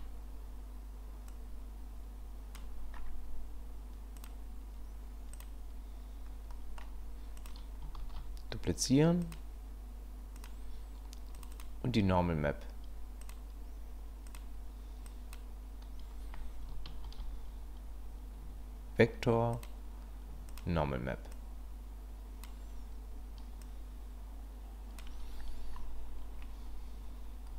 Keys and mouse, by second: 1.5-2.6 drag, 4.2-5.4 drag, 6.5 middle click, 8.0 ctrl+shift+d, 10.5 click, 13.2-14.4 drag, 15.1 click, 17.1 shift+a, 21.3-22.4 drag, 23.7-25.0 drag.